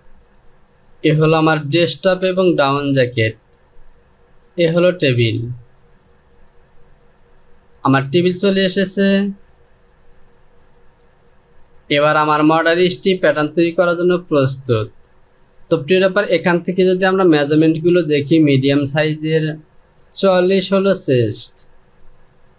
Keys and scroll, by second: 9.3 j.